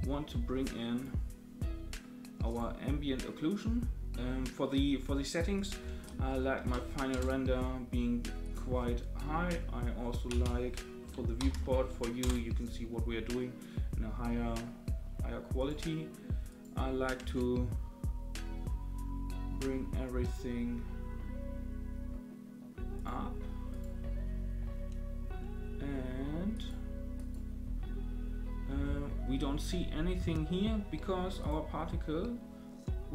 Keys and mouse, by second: 0.9 click, 2.5 click, 5.6-7.7 drag, 8.4-12.8 drag, 15.6 click, 16.5 click, 17.2 space, 23.0 click, 23.7 click, 26.5 click, 27.1 click, 28.7 space.